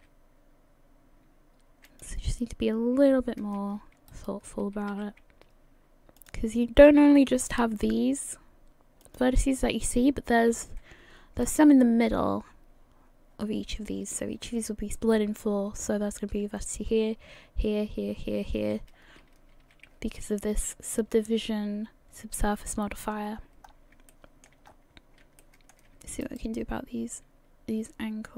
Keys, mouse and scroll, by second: 2.2-2.9 scroll down 3, 3.1-3.8 scroll up 1, 4.1 alt+right click, 4.9 s, 7.0 g, 11.4 scroll up 2, 19.0-22.2 scroll down 9, 19.4 a, 22.2 a, 23.2-23.6 scroll down 3, 23.6-24.1 scroll up 2, 24.1 shift+middle click, 24.7-25.2 scroll up 5, 25.4 shift+middle click, 26.2 alt+middle click.